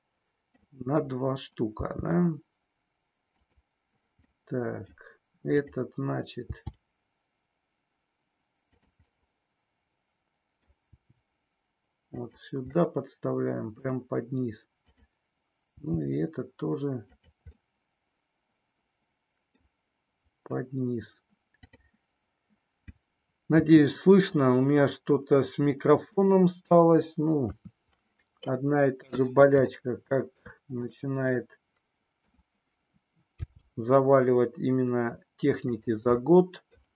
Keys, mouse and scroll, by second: 1.8 g, 3.4 click, 4.3 middle click, 4.3 scroll up 1, 6.4 g, 8.8 click, 9.0-11.0 middle drag, 9.0 scroll up 1, 11.0 g, 12.3 click, 13.0 middle click, 15.6 g, 17.1 click, 17.8-19.6 middle drag, 21.6 click, 23.5 e, 27.4 KP_3, 29.6 shift+middle click, 30.9-32.4 middle drag, 33.4 g, 35.8 click, 36.3 scroll up 1, 36.4 middle click.